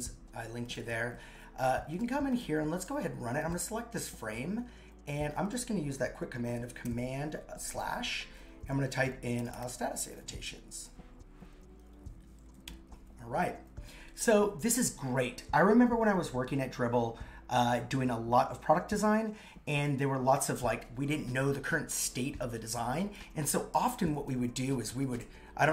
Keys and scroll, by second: 6.8 super+/.